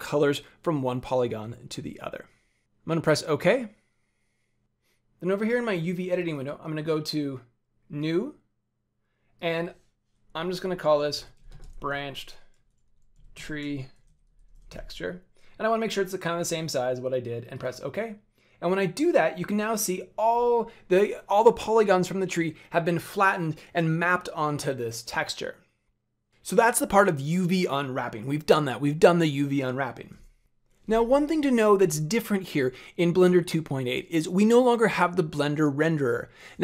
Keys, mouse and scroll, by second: 6.2 click, 13.3 e, 17.5 click, 18.5 scroll down 1, 19.5 scroll down 1.